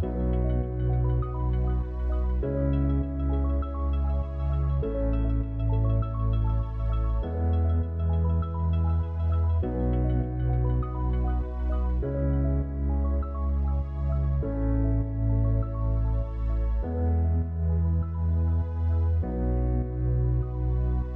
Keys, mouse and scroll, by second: 2.2 s, 4.3 s, 6.5 KP_0, 8.6 middle click, 9.2-10.2 scroll down 1, 15.2 ctrl+alt+KP_0, 18.5 click, 20.6-21.1 drag.